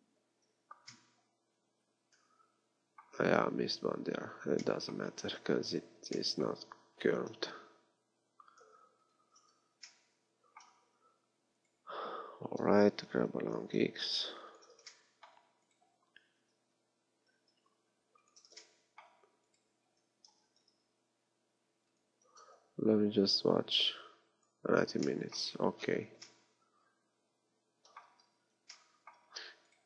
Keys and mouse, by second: 5.4 KP_1, 6.9 g, 9.2 click, 10.9 z, 12.2 z, 13.2 g, 16.4 g, 20.4 g.